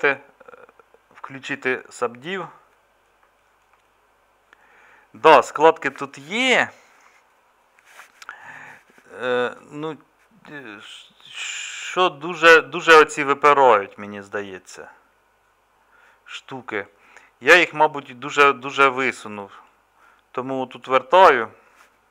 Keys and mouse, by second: 4.0-5.3 middle drag, 5.7-11.1 middle drag.